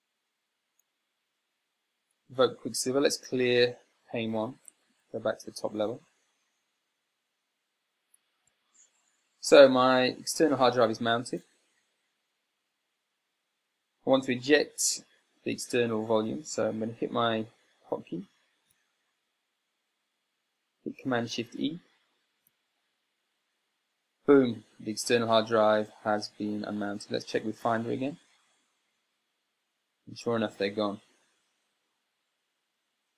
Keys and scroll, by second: 5.1 super+x, 8.9 Escape, 23.1 e, 29.0 super+n.